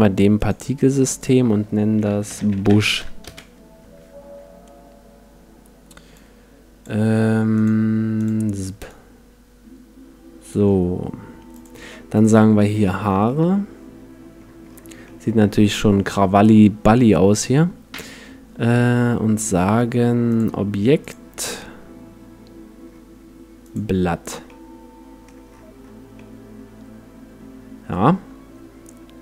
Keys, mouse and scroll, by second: 0.4-2.8 drag, 3.0 click, 6.1-7.5 drag, 8.3-10.7 drag, 11.5-13.5 drag, 13.3-20.3 middle drag, 20.3-22.8 drag, 24.5-28.0 middle drag.